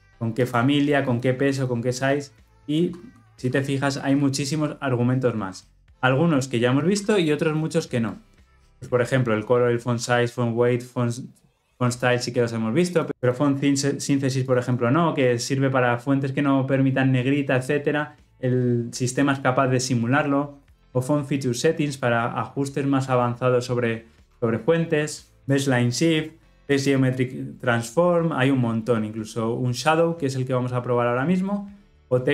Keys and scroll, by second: 4.0 ctrl+p, 7.6 ctrl+b.